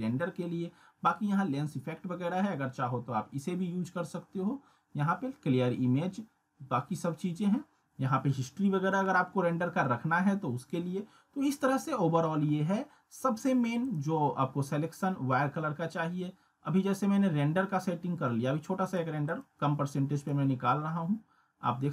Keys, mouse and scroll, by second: 13.8 click, 16.3 scroll up 1, 18.8 click.